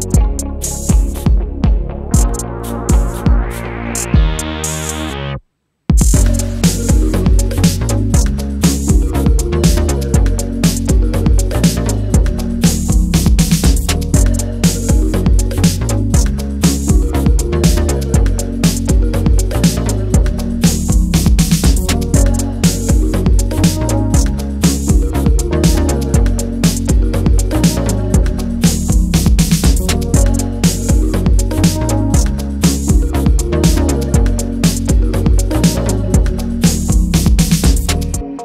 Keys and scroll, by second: 8.9 alt+shift+super+e, 18.6 super+i, 18.9 super+d, 24.8 alt+shift+super+b, 32.4 alt+shift+super+b.